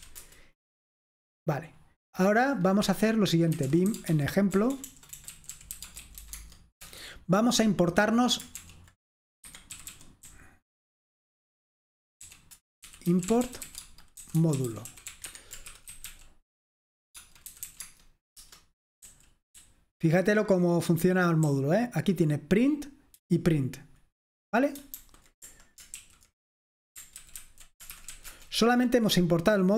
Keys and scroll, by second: 0.0-0.4 typing, 3.4-6.7 typing, 6.8 Return, 8.8 0, 9.5 Escape, 9.8 d, 10.9-21.5 typing, 23.2 j, 25.1 super+h, 26.0 super+l, 27.3 ctrl+w, 27.4 ctrl+w, 27.7-28.7 typing.